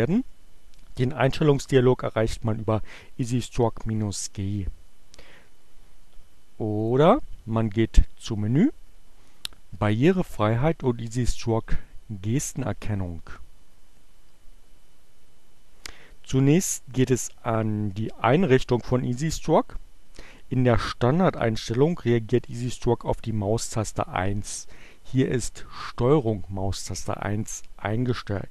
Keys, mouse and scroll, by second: 6.8 click, 11.5 click.